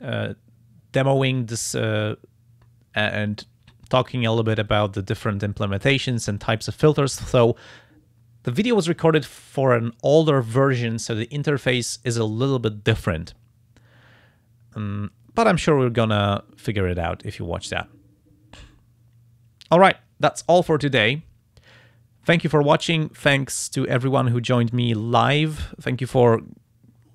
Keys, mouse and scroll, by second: 4.7 click, 6.0 click, 6.4 click, 6.9 click.